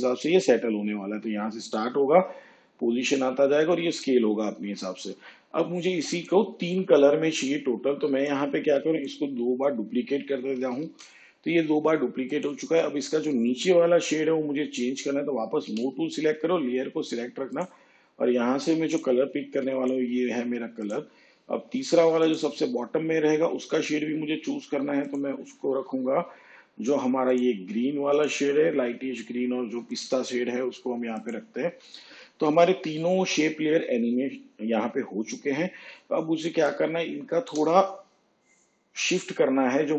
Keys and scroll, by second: 10.3 ctrl+d, 15.6 v.